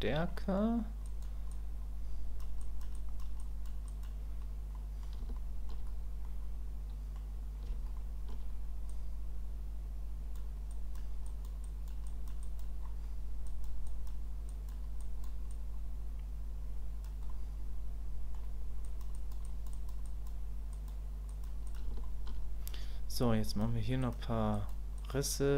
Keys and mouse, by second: 0.4 middle click, 1.0 click, 1.5 click, 2.6 click, 2.9 click, 3.4 click, 3.9 click, 4.7 middle click, 5.4 shift+middle click, 6.2 middle click, 7.9 shift+middle click, 8.9-10.3 drag, 10.8 click, 11.2 click, 11.7 click, 12.0 click, 12.4 click, 13.5 click, 13.9 click, 14.5 click, 15.0 click, 15.6-17.0 drag, 17.3-18.3 middle drag, 18.8 click, 19.1 click, 19.4 click, 19.8 click, 20.0 click, 20.7 click, 21.3 click, 21.7 click, 22.0 shift+click, 23.5 click, 24.0 click, 24.5 click, 25.0 click.